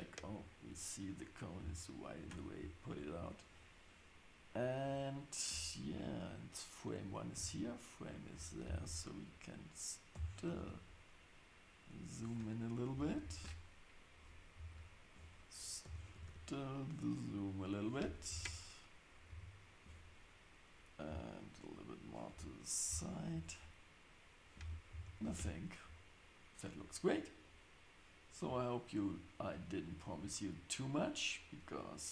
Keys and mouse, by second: 4.8 click, 7.3 shift+Right, 10.1 g, 13.2 shift+Left, 14.6 shift+Right, 15.8 g, 18.3 shift+Left, 19.3 shift+Right, 21.1 g, 22.3 Tab, 23.3 Tab, 24.9 shift+Left, 25.4 space.